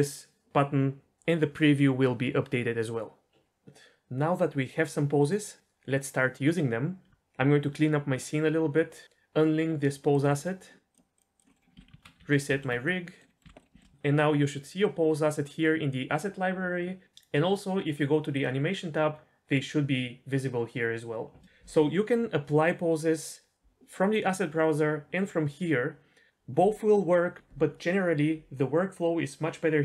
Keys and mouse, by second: 10.9 click, 11.5 middle click, 11.7 a, 12.0 alt+r, 12.2 alt+g, 12.5 alt+s, 12.8-13.3 middle drag, 13.3 middle click, 13.6 alt+a, 13.6 shift+middle click, 18.3 click.